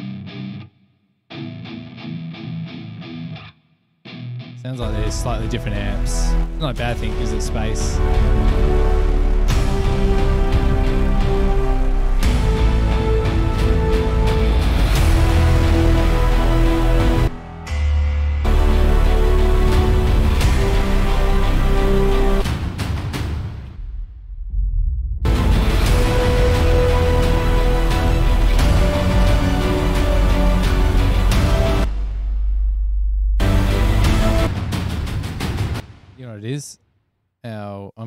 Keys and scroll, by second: 35.9 space.